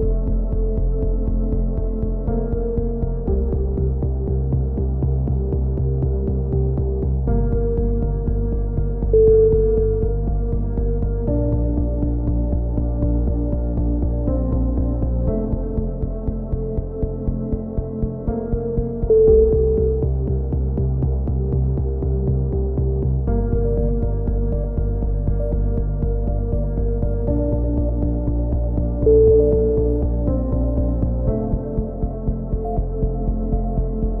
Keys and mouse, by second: 0.3 click, 1.1 ctrl+i, 1.3 h, 2.1 ctrl+z, 3.0 right click, 3.0 ctrl+l, 3.2 ctrl+i, 3.3 h, 4.0-4.4 right drag, 4.0 z, 4.4-5.6 middle drag, 6.5 middle click, 7.1-7.6 drag, 7.6 a, 9.1 drag, 9.1 e, 9.4-10.0 drag, 10.0 g, 14.5 g, 15.6 click, 16.3 g, 20.3-20.7 right drag, 20.3 e, 20.7-21.3 drag, 23.3 a, 23.6-24.1 drag, 23.6 z, 24.1 ctrl+KP_1, 24.3-25.1 middle drag, 25.8 z, 26.7 z, 27.7-28.8 middle drag, 27.8 z, 28.2 b, 28.8 ctrl+KP_1, 29.0-29.3 middle drag, 29.8-30.7 drag, 31.4 a, 32.1 z, 32.3-32.8 drag, 33.1-34.2 right drag.